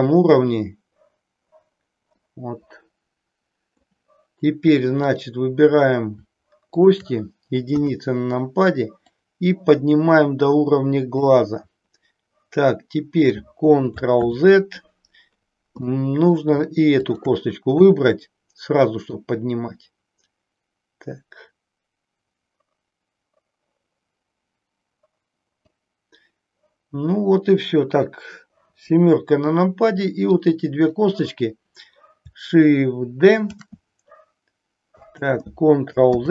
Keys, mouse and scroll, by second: 2.3-3.9 middle drag, 6.7 shift+click, 7.9 KP_1, 9.1-11.1 drag, 14.1 ctrl+z, 15.8 middle click, 17.0 shift+click, 17.8 KP_1, 19.2-25.6 drag, 28.6 KP_7, 30.4 click, 33.5 shift+d, 36.0 ctrl+z.